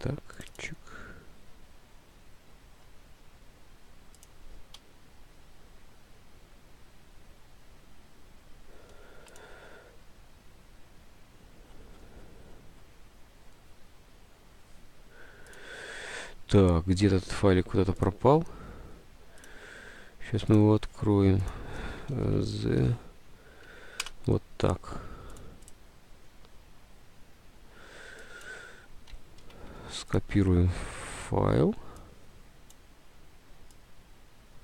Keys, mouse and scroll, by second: 4.9 F5, 22.0-23.8 typing, 23.7 Up, 24.1 Return, 29.6 ctrl+c, 31.1 ctrl+v.